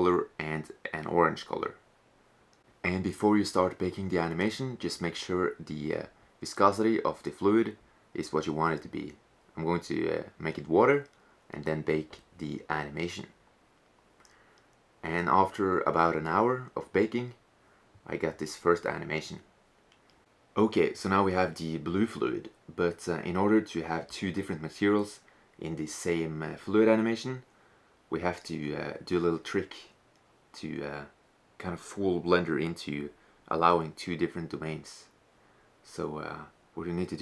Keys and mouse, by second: 0.0-1.9 drag, 4.2-6.1 drag, 7.2-9.2 middle drag, 9.3-11.4 drag, 18.0 click, 19.2-19.8 drag.